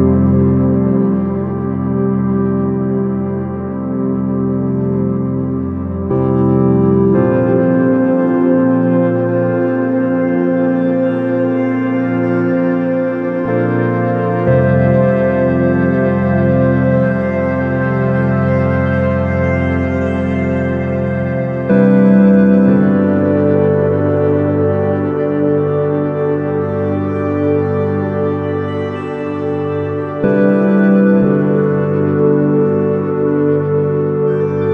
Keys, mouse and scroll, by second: 1.8-3.7 drag, 5.1-6.9 drag, 8.8-10.6 drag, 11.4 s, 13.7-15.5 drag, 17.8-19.7 drag, 22.7-24.5 drag, 27.2-32.3 drag.